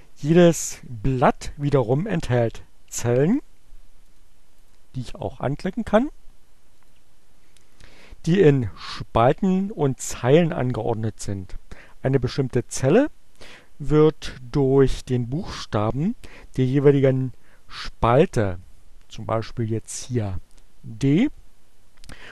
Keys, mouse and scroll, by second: 4.1 click, 4.6 click, 5.0 click, 5.7 click, 6.2 click, 19.6 click.